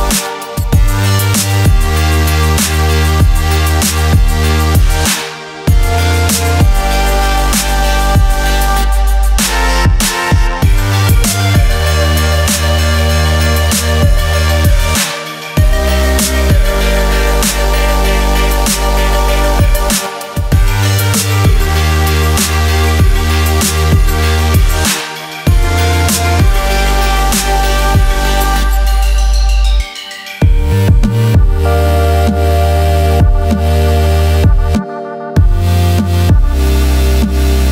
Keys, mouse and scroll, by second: 1.4 click, 14.0 click, 17.6 Up, 18.5 click, 24.0 Up, 25.7 Right, 26.8 click, 31.0 click, 31.9 alt+click, 34.0 alt+scroll up 1, 35.4 click, 36.0-36.4 alt+scroll down 1.